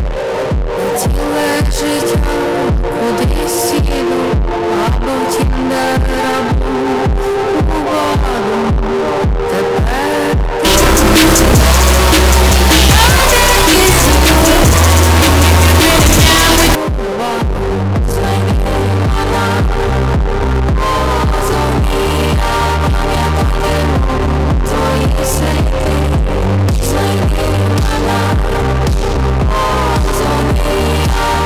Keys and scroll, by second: 16.8 Page_Down.